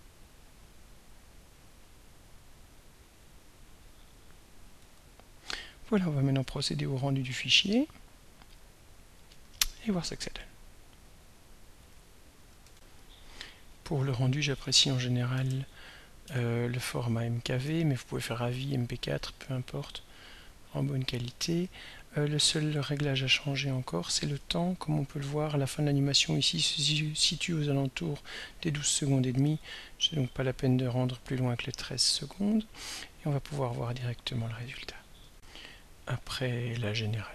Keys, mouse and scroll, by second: 5.0 ctrl+s, 7.4 click, 11.9 click, 12.7 r, 13.9 click, 14.6 End, 15.4 ctrl+BackSpace, 16.2 m, 16.8 k, 17.6 v, 19.6 click, 20.4 1, 23.1 click, 23.5 click, 28.3 click, 29.2-30.5 typing, 30.8 click, 32.4 click, 35.3 r, 36.8-37.3 drag.